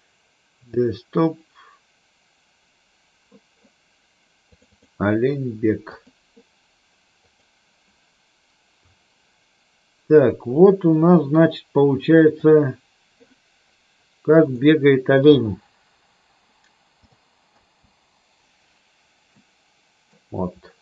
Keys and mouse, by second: 12.5 click, 17.8 space, 19.4-20.2 middle drag.